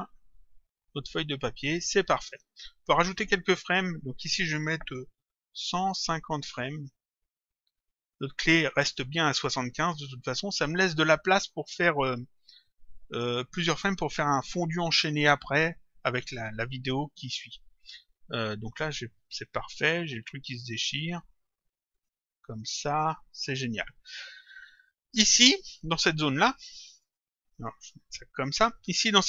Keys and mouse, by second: 1.8 click, 3.7 click, 6.7 Return, 8.0 click, 17.9 click, 21.0 click, 27.6 click.